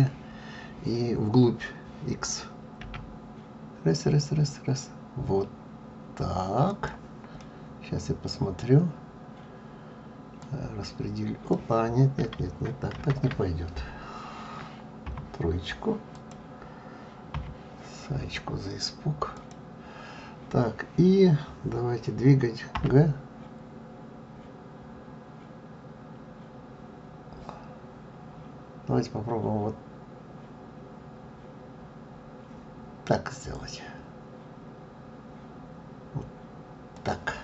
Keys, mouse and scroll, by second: 10.4 click, 16.1 click, 18.4 scroll up 1, 19.3 click.